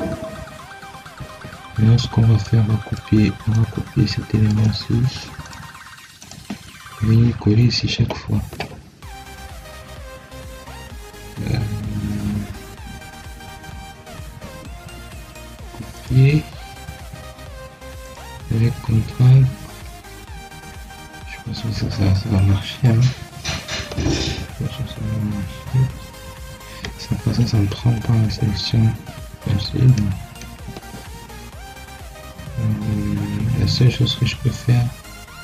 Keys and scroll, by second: 1.1 Escape, 29.0 Escape, 30.6 Escape.